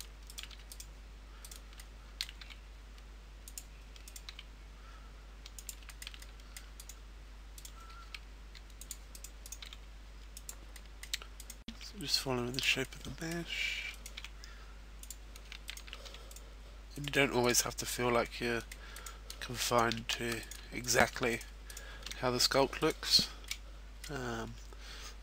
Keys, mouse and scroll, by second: 0.3 shift+right click, 0.5 f, 0.7 right click, 1.7 right click, 1.7 shift+middle click, 2.6 e, 3.7 click, 4.0 right click, 4.5 e, 5.9 click, 5.9 shift+middle click, 6.2 middle click, 6.8 right click, 7.7 right click, 8.2 g, 9.0 click, 9.0 right click, 9.8 e, 10.5 click, 10.7 middle click, 11.2 right click, 12.5 e, 12.8 click, 12.8 middle click, 13.9 right click, 14.4 e, 15.1 click, 15.6 shift+right click, 16.0 f, 16.3 right click, 17.2 right click, 17.4 shift+right click, 17.8 f, 18.2 middle click, 18.9 right click, 19.6 shift+right click, 20.1 f, 20.4 right click, 20.8 shift+right click, 21.2 right click, 21.2 f, 22.7 right click, 22.8 shift+right click, 23.1 f, 23.3 middle click, 24.4-25.1 scroll down 1, 25.1-25.2 scroll up 2.